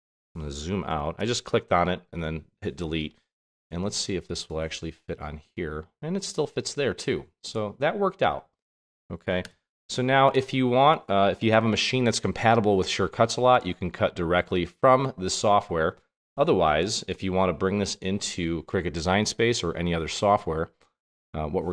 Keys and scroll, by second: 1.1 super+-, 9.7 BackSpace.